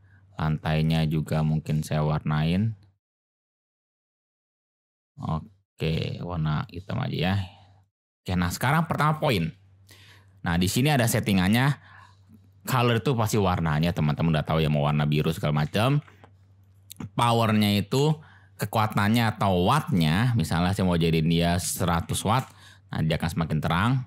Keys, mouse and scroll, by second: 3.6 click, 4.1 click, 4.9 click, 5.7 drag, 8.1 click, 15.9 ctrl+z, 16.7-23.3 drag, 22.1 0.